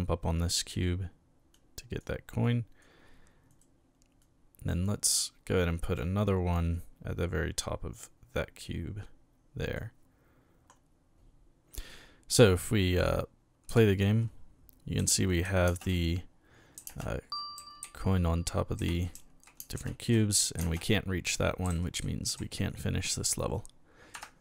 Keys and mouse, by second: 1.5 click, 2.4 click, 3.5 right click, 4.2-5.2 drag, 5.6 click, 6.7-9.7 drag, 13.7 p, 15.0 s, 15.4 a, 15.7 space, 16.8-22.2 typing, 24.2 Escape.